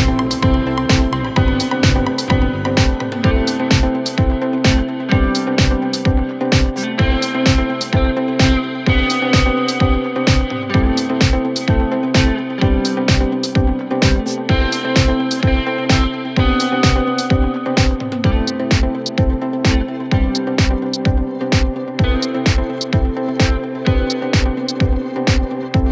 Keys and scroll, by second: 5.5 F2, 6.1 shift+F2, 6.5 Escape, 9.0 F4, 9.3 Escape, 16.1 KP_Add.